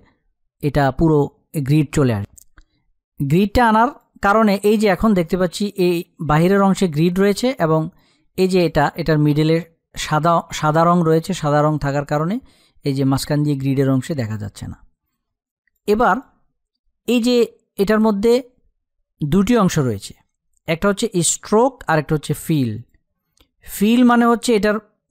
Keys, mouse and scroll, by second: 1.3 click.